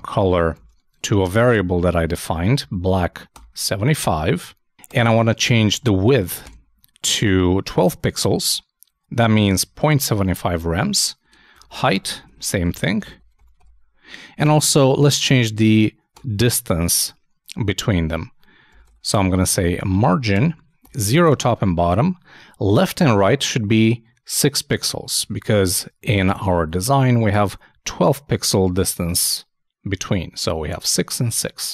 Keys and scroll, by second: 5.8-6.7 typing, 11.9-12.7 typing, 19.7 shift+n, 20.0 shift+;, 20.3 shift+space, 25.2 super+Tab, 26.0 super+2, 27.0 alt+super+2.